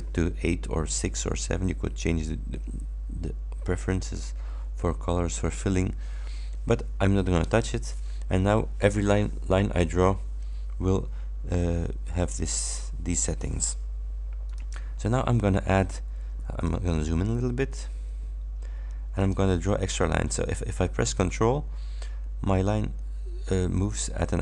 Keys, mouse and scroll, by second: 4.0 click, 14.5 click, 17.2-17.7 ctrl+scroll up 4, 19.3 click.